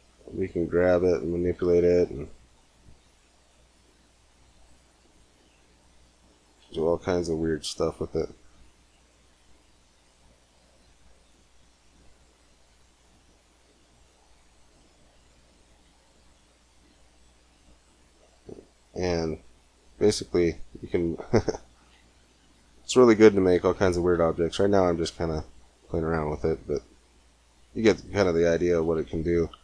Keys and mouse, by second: 0.9 click, 3.0 g, 3.6 click, 7.1-8.7 drag, 8.2 g, 12.2-14.1 drag, 12.6 g, 14.5 middle click, 15.7 Tab, 18.2 Tab, 22.1 a, 22.4 c, 23.9 g, 27.6 middle click.